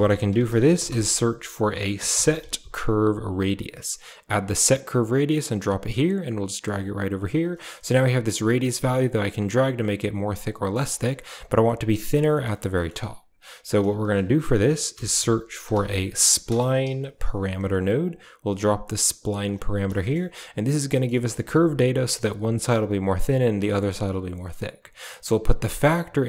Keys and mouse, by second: 5.9-7.0 drag, 7.8-10.6 shift+drag, 12.6 middle drag, 13.4 shift+a, 20.4 click, 20.9 middle click, 21.1 shift+middle click, 23.7 drag, 25.5-26.2 drag.